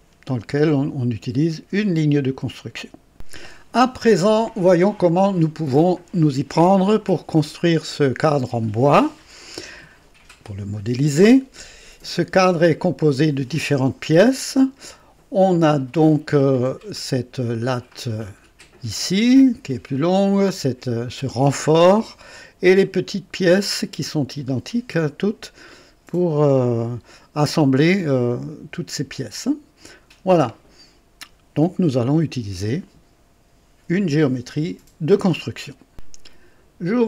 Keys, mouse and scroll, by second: 3.1 click, 18.2 click, 35.9 click.